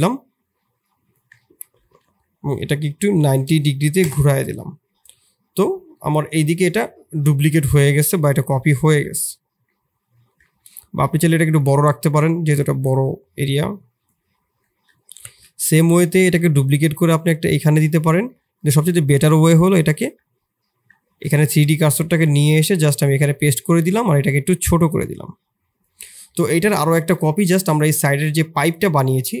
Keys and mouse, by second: 0.8 click, 1.3 shift+middle click, 1.7 r, 4.6-5.1 middle drag, 7.6 middle click, 8.9 KP_7, 9.7 middle drag, 11.0 s, 11.9 middle click, 13.0-14.1 drag, 14.6 shift+middle click, 15.3 KP_7, 16.2 shift+d, 18.3 click, 19.2 shift+click, 19.8 click, 20.0 Tab, 20.9 shift+s, 21.4 Tab, 21.8 click, 22.0 shift+s, 22.6 middle click, 23.2 s, 24.9-26.3 drag, 26.3 middle click.